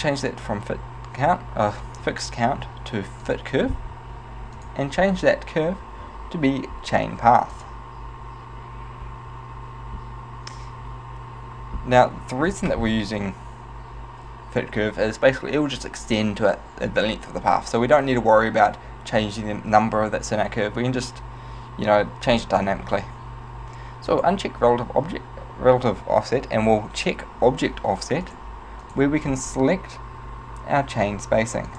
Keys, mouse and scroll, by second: 0.0 click, 4.6 click, 24.2 click, 28.3 click, 28.9 click.